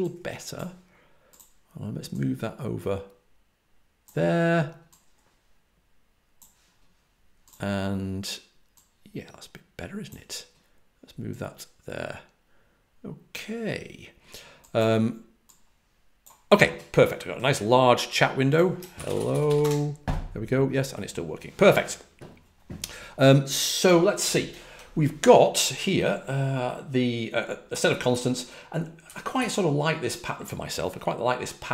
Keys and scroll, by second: 19.0-19.9 typing, 27.4-29.3 typing.